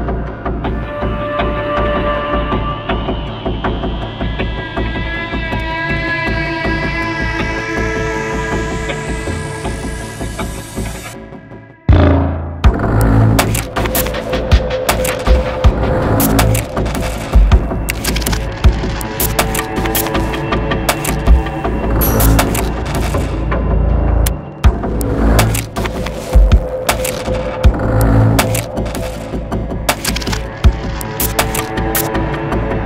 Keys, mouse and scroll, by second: 6.4 alt+scroll, 6.5-7.1 alt+scroll up 1, 7.1-7.5 alt+scroll up 1, 8.0 alt+scroll down 1, 21.5-24.8 scroll down 1, 27.1-30.1 scroll down 1.